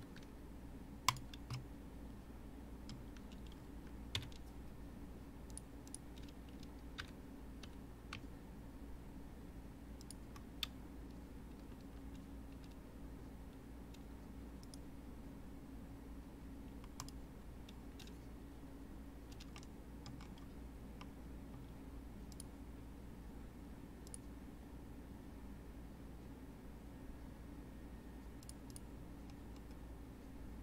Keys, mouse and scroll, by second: 1.5-4.1 middle drag, 4.1 KP_1, 5.9-6.9 drag, 6.9 g, 14.6-17.6 right drag, 19.5-20.1 middle drag, 20.1-21.0 scroll up 4, 21.0-22.3 middle drag, 22.3-25.3 drag, 28.4 click, 29.5-30.6 scroll down 2.